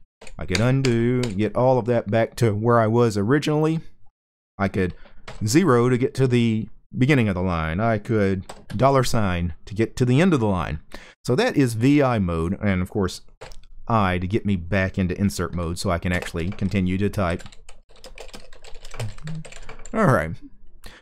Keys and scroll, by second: 0.0-0.9 typing, 4.9 0, 8.2 $, 13.1 i, 15.2 Right, 15.8 space, 16.9-21.0 typing.